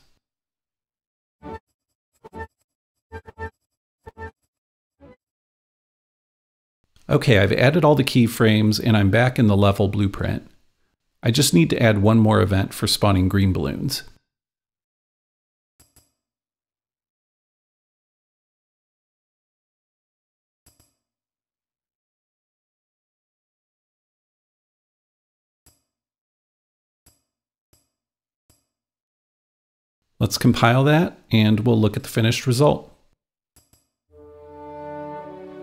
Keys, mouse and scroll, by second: 1.3 click, 1.6-3.8 shift+drag, 1.9 shift+g, 2.7 shift+g, 3.7 shift+super+s, 3.8 Return, 3.9 click, 4.6 n, 4.8-14.9 drag, 15.9-17.9 drag, 17.6-19.0 typing, 20.7-22.2 drag, 21.9-23.5 typing, 24.0 Return, 25.6-27.7 drag, 27.8-30.3 drag, 30.4-31.9 drag, 32.0-33.6 drag, 33.6-35.6 drag.